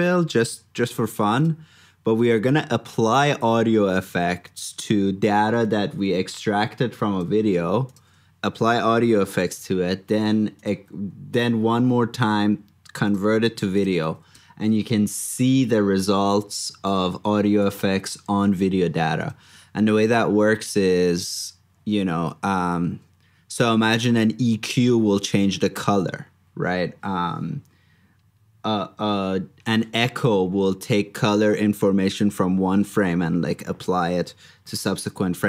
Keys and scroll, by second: 3.3 super+c, 4.4 super+v, 9.6 super+x, 13.4 super+c, 14.0 super+v, 18.3 super+Tab, 34.2 super+Tab.